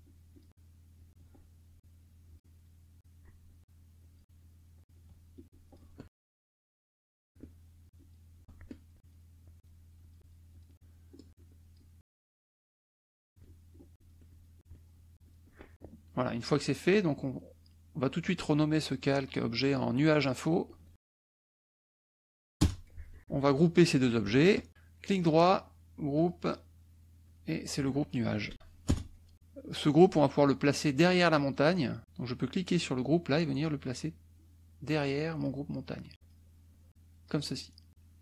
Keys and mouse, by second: 0.0 shift+click, 0.9 shift+click, 1.8 shift+click, 3.0 shift+click, 4.0 shift+click, 4.4 shift+click, 5.3 shift+click, 6.7 KP_Subtract, 7.0 click, 7.8 shift+click, 9.0 shift+click, 9.6 shift+click, 9.9 shift+click, 10.5 shift+click, 11.4 shift+click, 12.1 ctrl+shift+z, 13.1 ctrl+shift+z, 13.4-15.6 ctrl+shift+drag, 15.7 shift+click, 17.1 click, 18.6 click, 19.4 click, 20.1 click, 21.1-23.0 typing, 24.3 shift+click, 24.9 right click, 26.1 click, 27.2 click, 28.5 e, 32.8-35.6 drag, 36.2 click, 36.7 click.